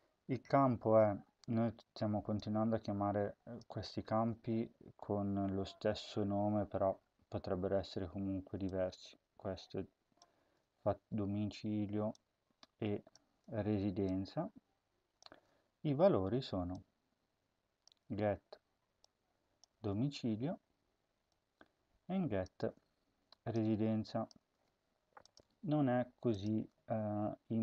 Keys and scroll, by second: 4.0 ctrl+c, 10.3 ctrl+v, 15.1 ctrl+v, 18.0 ctrl+c, 26.5 Return.